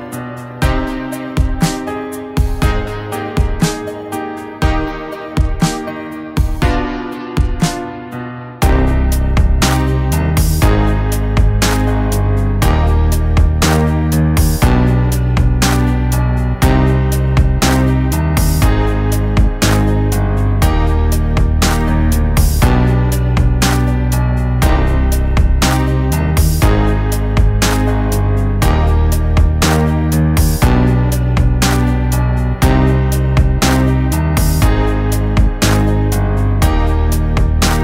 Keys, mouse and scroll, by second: 7.2-9.0 drag, 18.4 click, 21.1 Right, 22.7 click, 24.1 Right, 24.9-29.7 drag, 31.3-34.9 drag.